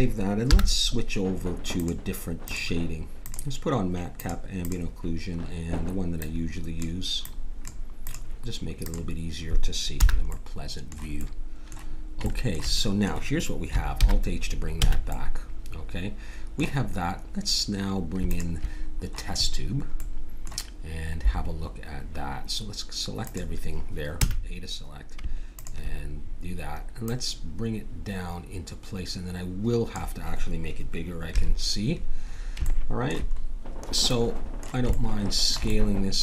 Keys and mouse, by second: 0.4 n, 10.0 n, 10.3-13.2 middle drag, 14.0 alt+h, 14.8 a, 18.3-20.0 drag, 20.0-23.2 middle drag, 23.2-25.0 drag, 24.2 a, 25.5-28.9 drag, 31.3 KP_7, 32.7 middle click, 35.2 middle click.